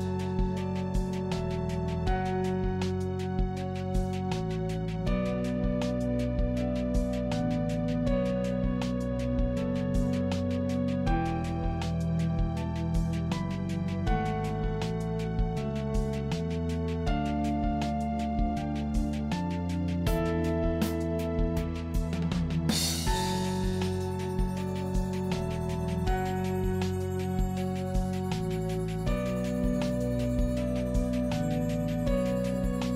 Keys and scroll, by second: 3.9 Up, 6.5 Down, 9.8 Down, 13.1 Down, 19.9 Up, 22.0 Up, 27.4 ctrl+j.